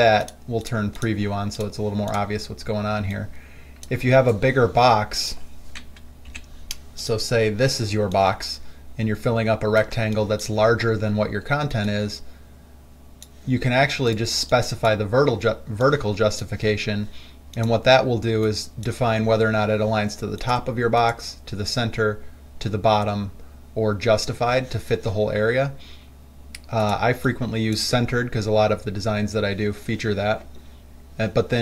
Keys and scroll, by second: 6.5 Delete, 10.2 space.